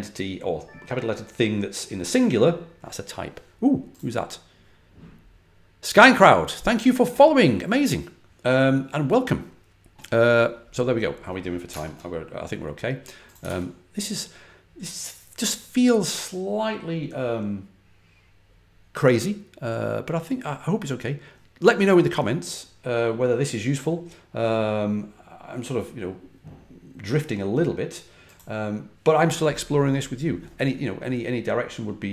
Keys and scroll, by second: 11.6 super+Tab, 13.3 super+w.